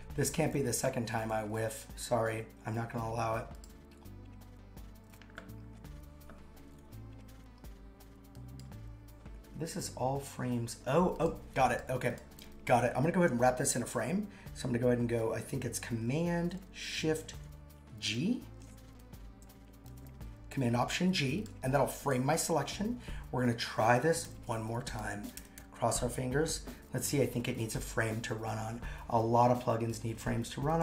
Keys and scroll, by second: 24.2 super+/, 24.9-26.1 typing, 26.2 Return.